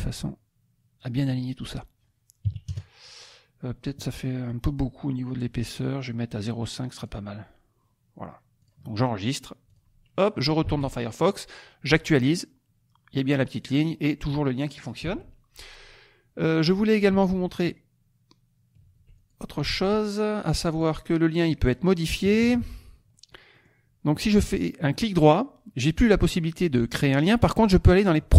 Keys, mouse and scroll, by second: 1.3 middle click, 2.5 KP_Subtract, 2.7 KP_Add, 6.2 right click, 6.9 click, 8.6 click, 9.6 click, 10.7 alt+Tab, 12.2 click, 15.1 alt+Tab, 17.2 alt+Tab, 19.1 alt+click, 19.7 alt+Tab, 20.8 click, 21.6 click, 22.3 KP_Subtract, 23.1 middle click, 23.7 middle click, 24.9 right click.